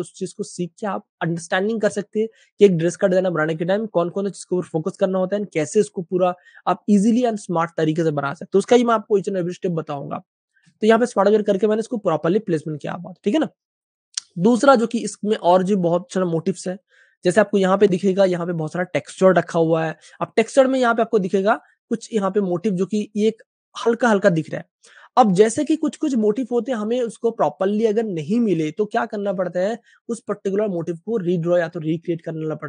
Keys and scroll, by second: 10.7 Page_Down, 17.3 space, 18.9 super+space, 19.0 super+space, 19.8 typing, 21.0 super+space, 21.7 typing, 22.4 super+space, 23.0 typing, 26.0 super+space, 26.4 typing, 27.0 super+space, 29.3 Page_Up.